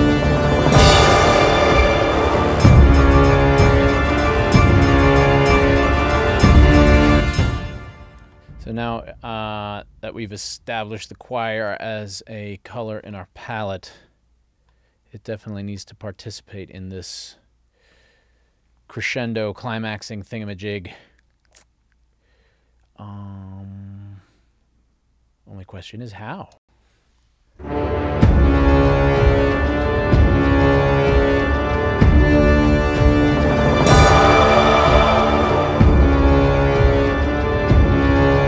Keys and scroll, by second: 7.1 space, 26.6 space.